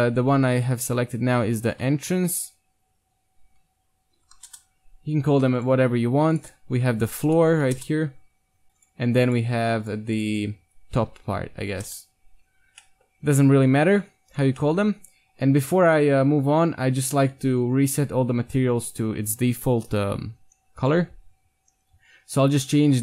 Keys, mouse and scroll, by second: 5.6-8.4 drag, 7.6 o, 8.8-12.1 drag, 12.8 middle click, 13.4 KP_1, 20.8-22.7 drag.